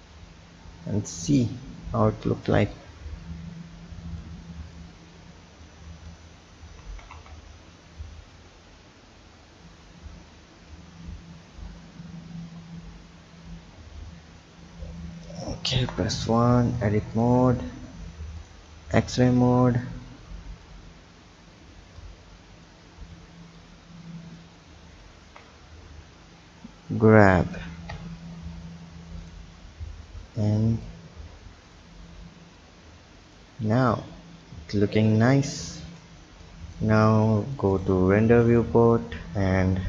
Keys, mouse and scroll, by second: 2.7-4.2 drag, 4.7 click, 6.0 right click, 6.8 ctrl+z, 7.2 ctrl+z, 8.3 click, 15.7 KP_1, 16.6 Tab, 17.1 click, 18.3 click, 19.2 b, 20.9-22.0 scroll up 1, 22.0-23.7 drag, 25.2 ctrl+z, 26.1 click, 27.9 Tab, 29.2-29.8 drag, 29.8-30.5 scroll down 1, 30.5 click, 31.1-31.7 scroll down 3, 31.7 drag, 32.6 click, 33.6-34.4 scroll down 2, 34.4 click, 35.4-36.4 scroll up 1, 36.4-37.9 drag.